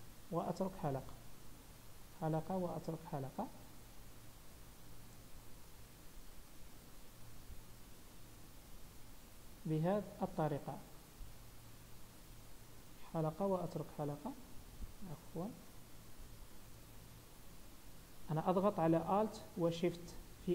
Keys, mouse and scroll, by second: 1.2 alt+shift+click, 2.1 alt+click, 9.5-10.3 scroll down 4, 10.3-11.1 scroll up 3, 11.1 scroll down 1, 11.8 scroll up 1, 14.1 alt+shift+click, 16.4 ctrl+z, 17.6 alt+shift+click, 19.2 scroll up 1, 19.7 scroll down 1.